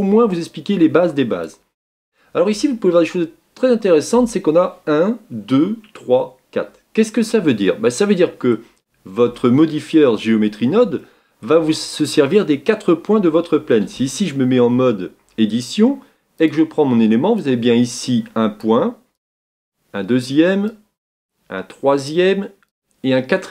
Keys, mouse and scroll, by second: 0.0-7.3 drag, 7.3-10.3 middle drag, 10.3-11.0 scroll up 6, 11.0-11.7 shift+middle drag, 11.7-12.6 scroll up 4, 13.9 Tab, 16.5-23.5 drag.